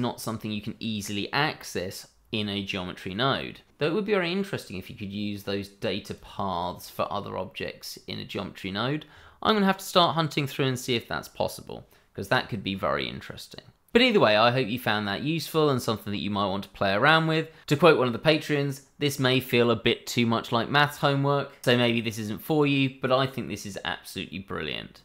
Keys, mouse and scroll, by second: 6.1 click.